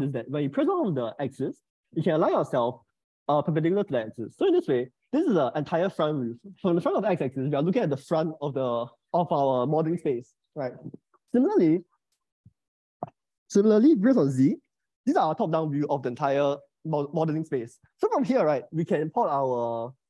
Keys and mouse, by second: 4.9 shift+middle click, 14.5 click.